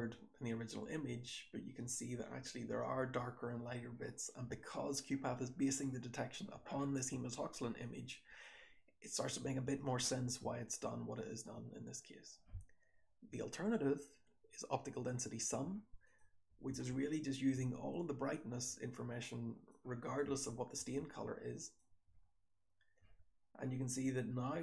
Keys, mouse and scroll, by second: 0.1-0.8 scroll up 1, 0.1-2.9 typing, 0.8-1.6 scroll up 1, 1.6-2.9 scroll up 1, 2.9 scroll up 1, 4.3 h, 5.2 h, 6.0-7.7 scroll down 1, 7.7-8.4 drag, 7.7-8.4 scroll down 1, 8.4-9.1 scroll down 1, 9.1 click, 9.1-14.8 scroll down 1, 9.3 h, 9.9 h, 15.9 click, 16.6 h, 19.9 click, 20.1 h, 20.7 h, 20.8-21.7 drag, 22.0 h, 22.9 h.